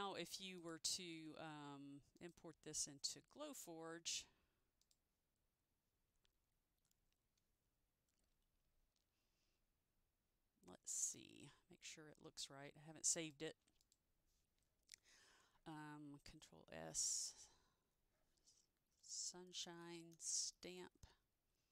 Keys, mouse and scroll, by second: 0.7 click, 2.3 click, 4.9 click, 13.3 click, 16.5 ctrl+shift+s, 18.8 typing, 20.1-21.7 typing.